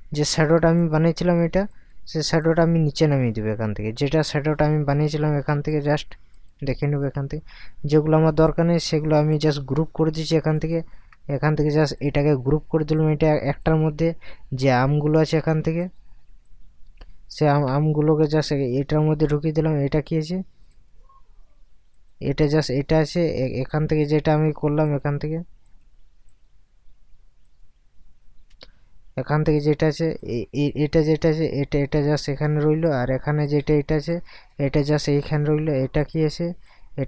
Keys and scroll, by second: 8.9 Caps_Lock.